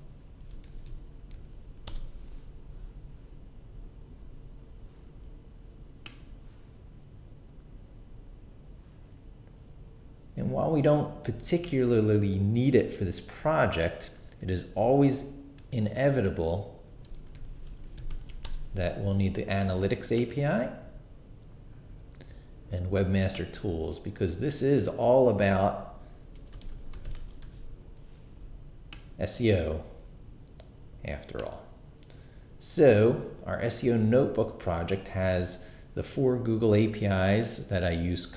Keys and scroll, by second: 0.2-1.4 typing, 1.9 Return, 16.6-18.6 typing, 26.1-27.9 typing.